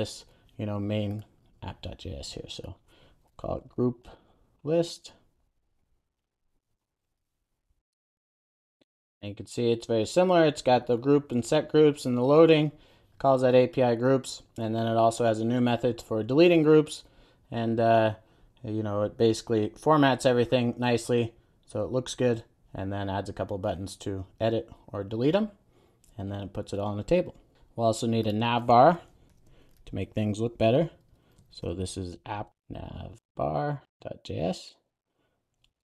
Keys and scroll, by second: 6.7 super+a, 8.1 Return, 8.3 super+s, 29.2 super+n.